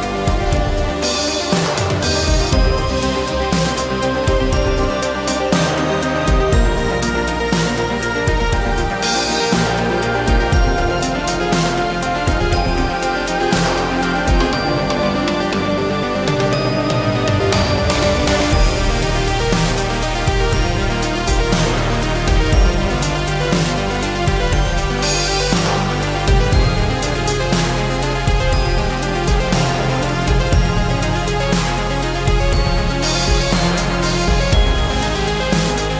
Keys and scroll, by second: 3.4 space, 6.7 ctrl+a, 7.5 s, 9.0 space, 9.1 Escape, 13.9 v, 15.0 space, 15.0 Escape, 22.2 space, 22.3 Escape, 27.4 ctrl+a, 28.3 s, 34.1 space, 34.2 Escape, 34.7 space, 34.8 Escape.